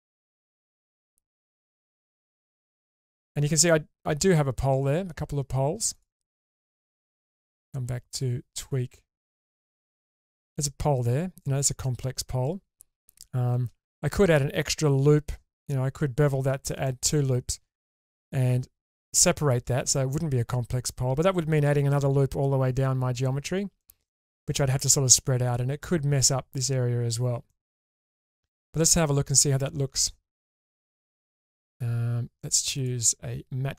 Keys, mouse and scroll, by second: 2.2-3.3 middle drag, 5.1-5.9 scroll up 2, 5.9 click, 6.5-8.7 drag, 9.1 click, 9.8 1, 10.2-11.0 scroll up 2, 11.0 click, 11.9-13.1 middle drag, 13.6-14.0 scroll down 2, 14.1 middle click, 14.7 scroll up 3, 16.9 shift+middle click, 23.3-23.7 scroll down 2, 23.8 shift+middle click, 24.3 middle drag, 25.6-26.5 scroll up 1, 27.0-27.3 scroll down 2, 27.5 shift+middle click, 27.9-28.3 middle drag, 28.5-29.3 scroll up 2, 29.3 Tab, 30.5-31.3 middle drag, 32.7-33.7 drag.